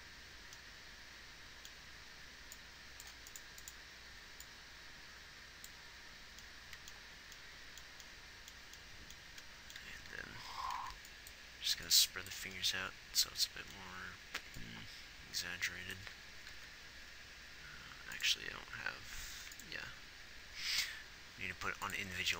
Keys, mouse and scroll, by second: 9.6-11.1 typing, 12.1 b, 16.9 ctrl+z.